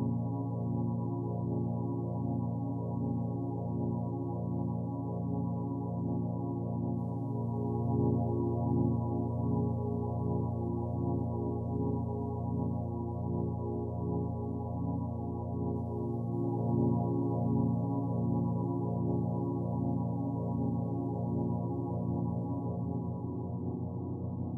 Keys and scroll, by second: 5.9 ctrl+t.